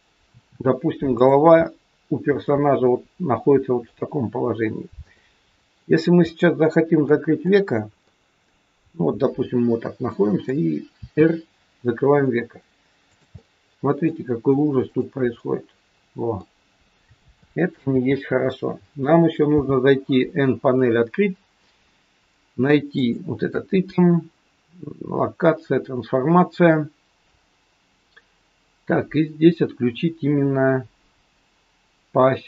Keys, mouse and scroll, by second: 0.2 r, 1.6 middle click, 2.8 middle click, 4.1-4.4 scroll up 3, 5.1 middle click, 6.2 middle click, 7.3 click, 8.1 middle click, 11.0 r, 13.3 middle click, 14.8 click, 15.3 middle click, 15.3 scroll up 1, 17.8 ctrl+z, 19.6 n, 23.0 click.